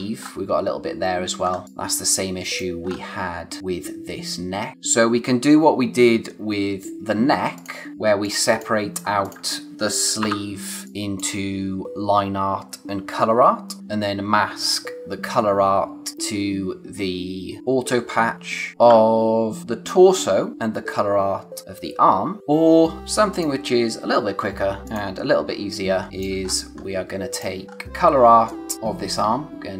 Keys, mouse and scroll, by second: 1.0-1.6 scroll down 1, 1.6 click, 1.9 space, 2.8-3.9 scroll up 1, 4.7 scroll up 1, 7.9 scroll down 1, 8.0 space, 8.2 click, 8.5 space, 9.0 scroll up 1, 9.2 click, 10.2 o, 10.8 click, 11.2 space, 22.4 click, 23.3 click, 25.3-25.7 scroll down 1, 26.0 space, 26.4-27.3 scroll up 1, 27.3 click, 27.6-28.2 scroll up 1, 28.2 space, 28.4 click, 28.7 space, 28.7 click.